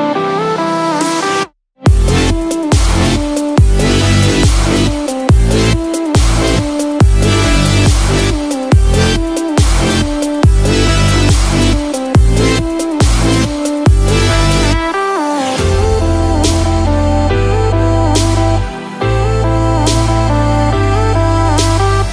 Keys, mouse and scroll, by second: 0.1 s, 5.0-5.3 scroll down 1, 6.3 shift+middle click, 6.3-6.7 scroll down 4, 7.0 middle click, 7.8 shift+middle click, 8.3-9.0 scroll up 5, 9.0 shift+middle click, 9.4 middle click, 9.9 shift+middle click, 10.3 scroll up 2, 10.7 shift+middle click, 11.1 middle click, 11.7 click, 12.3 shift+click, 12.8 click, 14.5 click, 16.0-16.7 scroll down 1, 19.1 n.